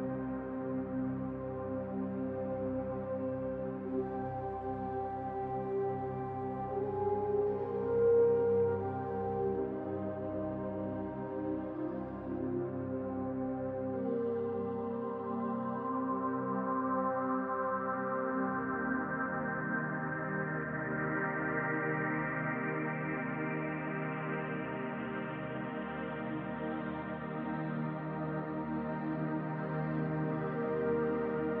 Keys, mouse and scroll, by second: 0.4 click, 0.7-2.8 middle drag, 2.8 click, 3.2-5.6 middle drag, 5.6 click, 6.0-8.0 middle drag, 8.0 click, 8.4-9.7 middle drag, 9.7 click, 10.0-11.3 middle drag, 10.3-11.3 scroll up 2, 11.3-12.5 drag, 11.7-12.5 scroll down 2, 12.5-15.5 middle drag, 13.2-13.7 scroll up 2, 13.7-15.5 scroll up 4, 15.5-16.5 drag, 15.8-16.5 scroll down 2, 16.5-27.2 middle drag, 17.2 scroll down 2, 17.6-18.7 scroll up 4, 27.2 click, 29.0 middle click, 29.8 click, 30.3 scroll up 2, 30.5-31.6 middle drag.